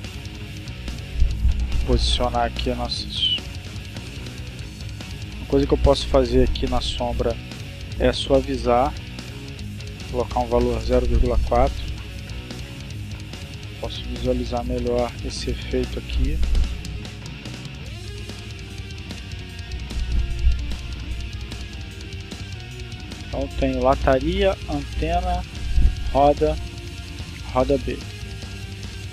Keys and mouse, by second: 7.6-9.9 drag, 10.2 4, 10.4 Return, 13.1-14.2 drag, 14.3 click, 18.3 click, 20.7 click, 22.0 click, 23.7 click, 25.0 click, 26.7 click.